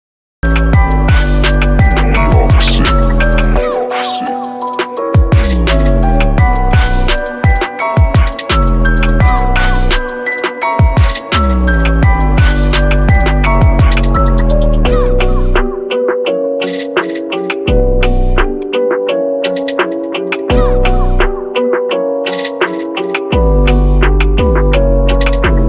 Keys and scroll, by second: 17.4 f.